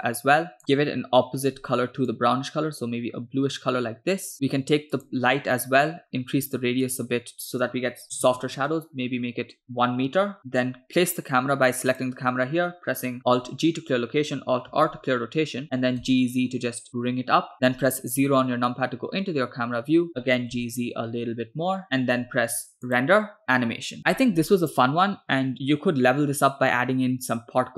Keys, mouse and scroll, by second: 4.3 middle click, 5.0 click, 6.9-8.6 drag, 9.6 click, 11.9 click, 13.7 alt+g, 15.1 alt+r, 15.8 g, 18.3 KP_0, 20.0 scroll down 2, 20.2 g, 22.9-24.0 drag.